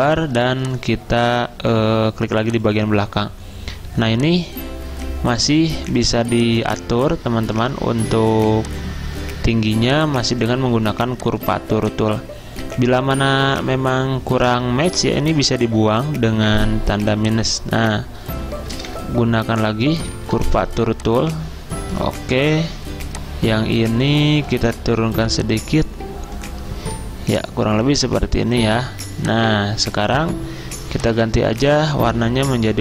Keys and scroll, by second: 14.5 a, 18.8 `, 20.2 ~, 31.8 typing.